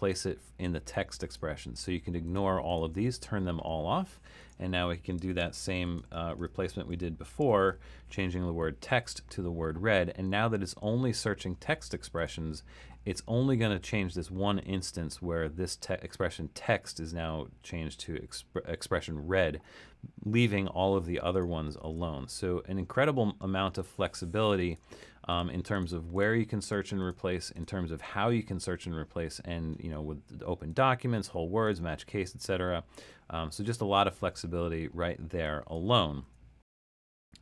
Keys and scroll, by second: 5.1-8.1 typing, 21.8 super+z, 35.7 BackSpace, 36.3 BackSpace.